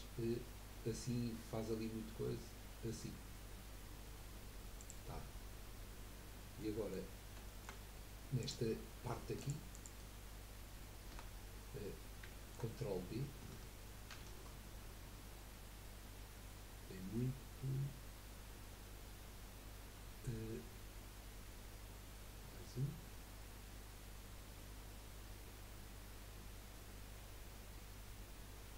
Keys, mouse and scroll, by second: 6.6 middle click, 7.1-7.4 scroll up 1, 7.4 shift+middle click, 8.4 click, 9.4 alt+shift+click, 9.7 alt+shift+click, 11.9 scroll up 1, 12.3 shift+middle click, 12.7 scroll up 1, 14.1 ctrl+b, 19.1-26.5 drag, 19.1-26.5 middle drag, 19.1-26.5 right drag.